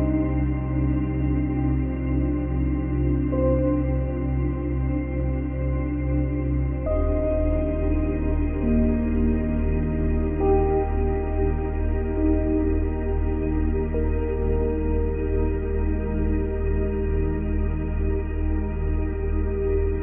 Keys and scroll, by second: 13.4 space.